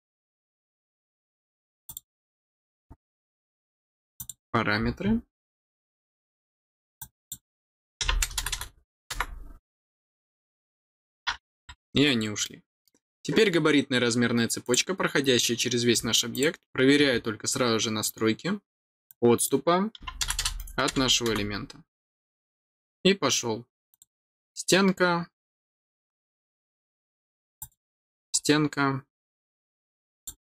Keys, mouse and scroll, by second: 1.8 click, 4.1 click, 6.9 click, 10.2-10.7 scroll down 2, 12.0 scroll down 1, 12.4 middle click, 14.6 click, 16.3 click, 19.0 click, 23.9 click, 26.2 scroll down 1, 27.5 click, 28.5 scroll down 1, 30.1 click.